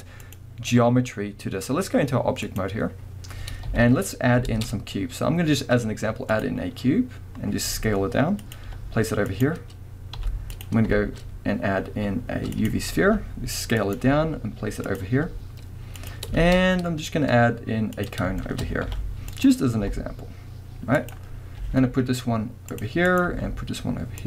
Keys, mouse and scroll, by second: 0.2-8.6 drag, 3.7 KP_1, 4.5 shift+a, 6.7 scroll down 1, 7.4 scroll up 1, 7.7 s, 8.7 g, 9.4 click, 10.2 s, 10.6 click, 11.0 shift+a, 13.1 s, 14.0 click, 14.0 g, 15.0 click, 15.2 s, 16.1 click, 16.4 shift+a, 18.4-18.7 shift+middle drag, 18.8 middle click, 18.8 g, 19.5 click, 19.8 s, 21.1 click, 21.3 scroll up 1, 21.6 g, 23.1 click, 23.2 g.